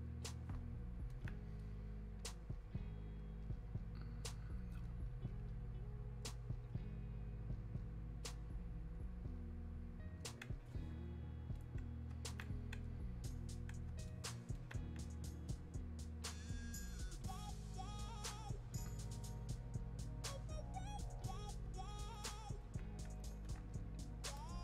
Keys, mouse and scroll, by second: 1.1-21.3 alt+drag, 21.7 alt+click, 21.9 click, 22.6-24.6 alt+drag.